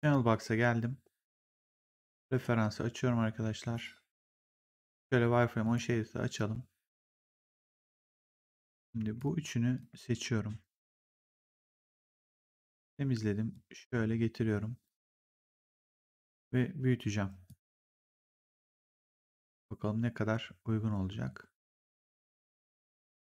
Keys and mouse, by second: 1.4 click, 4.2 click, 5.5 click, 8.6 click, 9.0 shift+click, 12.0 click, 13.4 click, 16.4 r, 17.4 click.